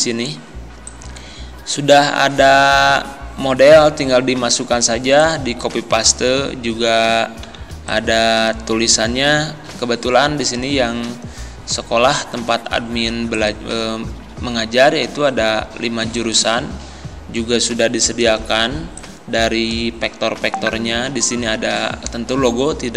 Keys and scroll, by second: 7.6 z, 18.7 z.